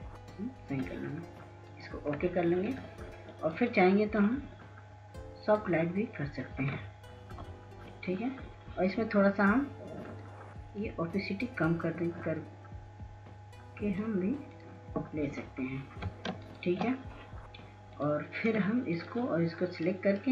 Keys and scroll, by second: 9.2 ctrl+0, 18.2 ctrl+space, 18.6 ctrl+space, 18.7 ctrl+space.